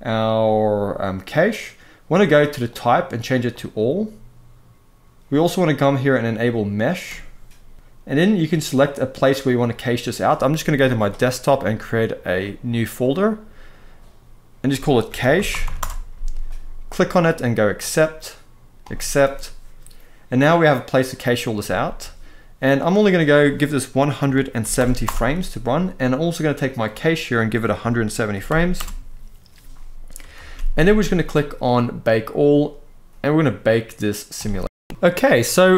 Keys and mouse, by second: 2.4-3.4 drag, 9.3 click, 21.5 ctrl+s, 22.7-24.7 drag, 26.5-28.6 drag, 30.1 ctrl+s, 34.0 click, 34.9 space.